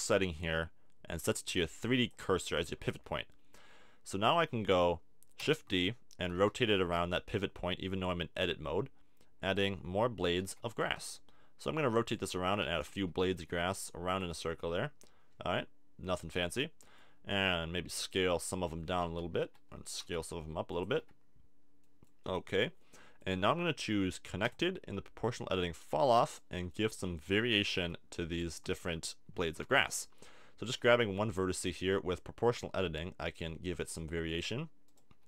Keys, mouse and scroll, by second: 0.2 click, 3.1 middle click, 3.1 KP_7, 5.4 shift+d, 6.3 r, 9.5 click, 9.9 click, 10.4 shift+d, 11.0 click, 11.0 r, 12.0 click, 12.6 shift+d, 13.1 r, 17.3 s, 18.1 click, 18.5-20.9 typing, 23.2 click, 23.6-25.1 drag, 26.3-27.8 middle drag, 27.8 a, 28.3 middle click, 30.6 g, 34.4 click, 35.1 g.